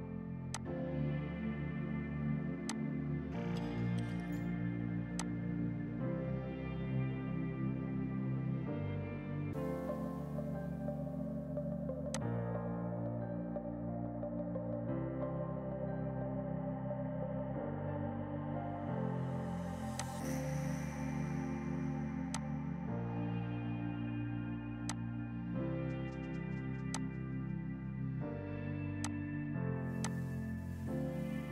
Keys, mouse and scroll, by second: 0.6 click, 2.5 F2, 2.7 click, 12.1 click, 12.3 ctrl+Num_Lock, 15.7 ctrl+z, 20.0 click, 22.4 click, 24.9 click, 25.4 right click, 27.0 click, 29.1 click, 30.0 click.